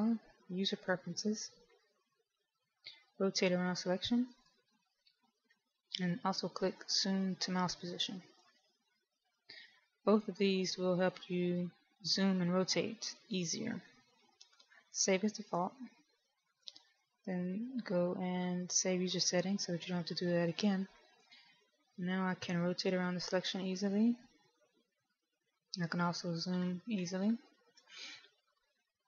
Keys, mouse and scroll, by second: 1.2 click, 18.3 click, 21.9 middle click, 26.2-26.6 scroll up 2, 26.6-28.9 scroll down 4, 28.9 KP_1.